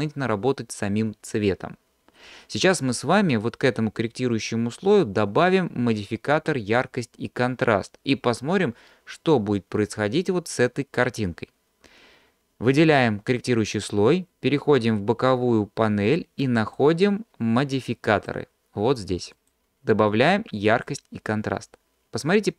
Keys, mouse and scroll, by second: 16.1-16.8 drag, 17.8-18.4 drag, 19.4-21.0 drag, 21.9-22.4 scroll down 2.